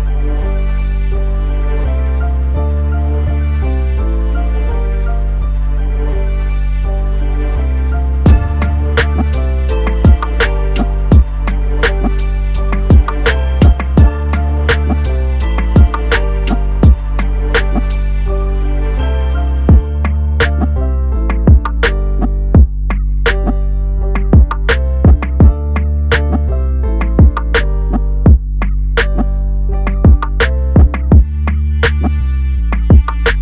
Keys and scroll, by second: 3.2 ctrl+j.